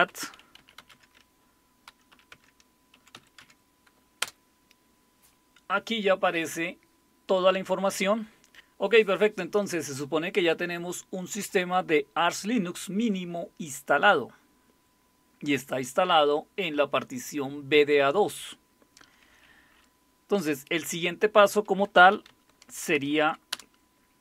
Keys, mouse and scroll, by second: 0.0-4.2 typing, 21.7-23.7 typing.